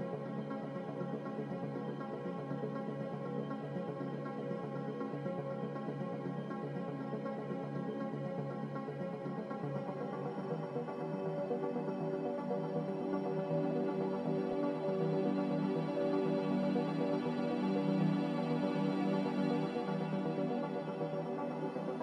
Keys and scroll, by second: 0.4 Delete, 3.5-5.7 typing, 3.9 Tab, 4.4 Return, 14.7 s, 15.8-18.9 typing, 20.8 s.